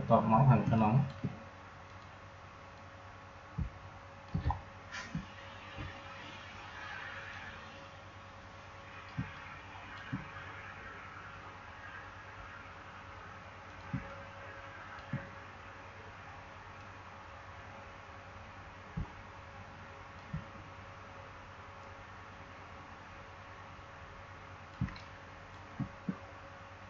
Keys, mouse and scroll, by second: 0.5 space, 0.7 click, 1.0 space, 1.8-4.4 drag, 4.4 alt+scroll down 1, 7.2-9.0 drag, 9.0 space, 9.3 click, 9.5 space, 13.6 click, 13.8 space, 14.0 click, 14.2 space, 16.7-21.7 drag, 21.7-24.7 drag, 24.7 space, 24.9 click, 25.1 space.